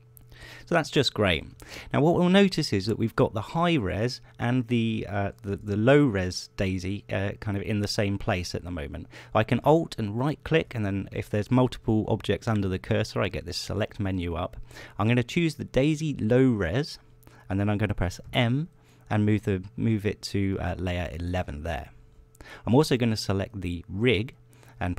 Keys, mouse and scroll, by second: 1.4 middle click, 6.2 g, 7.9 click, 10.4 alt+click, 10.7 alt+middle click, 16.3 click, 18.7 m, 21.6 click, 24.0 right click.